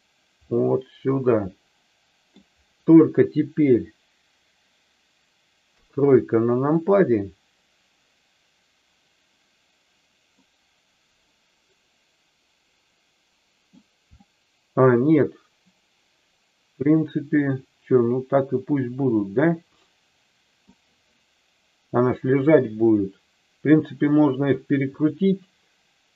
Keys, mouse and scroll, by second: 0.5-2.3 middle drag, 5.7 KP_3, 10.3-13.8 middle drag, 14.2-20.7 middle drag.